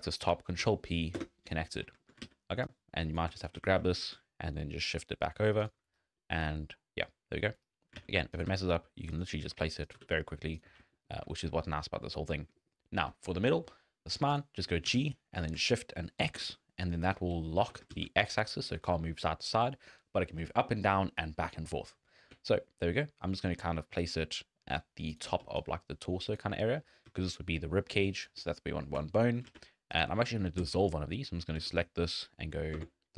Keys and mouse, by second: 0.6 ctrl+p, 2.0 shift+middle click, 2.3 alt+a, 2.7 click, 3.4 shift+middle click, 3.5 z, 3.9 g, 6.2 shift+middle click, 7.9 alt+a, 8.5 g, 9.9 g, 11.3 shift+click, 11.7 shift+click, 12.6 shift+click, 14.9 g, 17.6 g, 25.4 d, 25.6 click, 26.4 d, 26.5 d, 27.1 d, 27.3 click, 28.2 d, 28.3 d, 29.0 shift+click, 29.5 alt+a, 29.9 click, 30.6 x, 31.3 click, 31.5 x, 32.7 Delete.